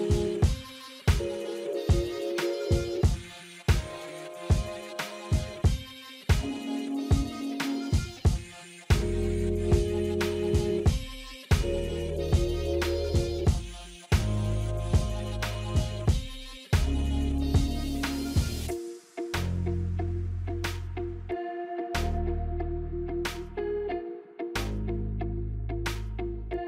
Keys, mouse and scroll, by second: 1.0 click, 1.1-2.2 alt+scroll down 4, 1.8 click, 2.7-3.2 alt+scroll up 3, 4.7-10.6 drag, 12.2 click, 12.3 alt+scroll down 1, 13.0 click, 13.3 alt+scroll down 1, 15.0 alt+scroll up 1, 15.6 space, 15.7 click, 15.9 space, 17.2 click, 17.5 space, 18.5 click, 18.5-24.0 drag, 26.0 F9.